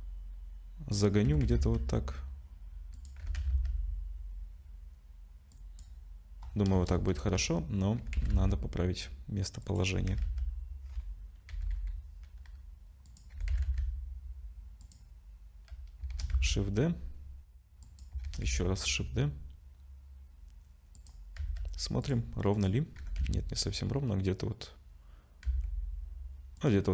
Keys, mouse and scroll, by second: 1.3 s, 3.2 g, 6.7 KP_0, 7.1 z, 8.0 g, 9.9 g, 13.3 g, 16.1 shift+d, 18.2 shift+d, 21.4 z, 22.0 click, 22.5 click, 23.0 g.